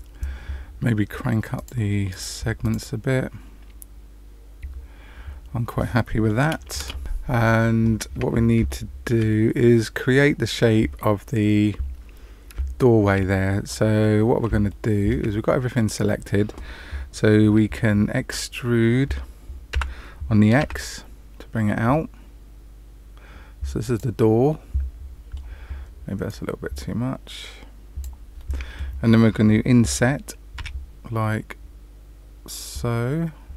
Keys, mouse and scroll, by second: 1.5 click, 2.0 click, 3.2 click, 6.7 Return, 8.6 shift+middle click, 9.2 middle click, 12.7 shift+middle click, 14.0 middle click, 14.6 shift+middle click, 15.2 middle click, 19.7 e, 24.4 middle click, 26.2 click, 28.3 middle click, 30.5 i.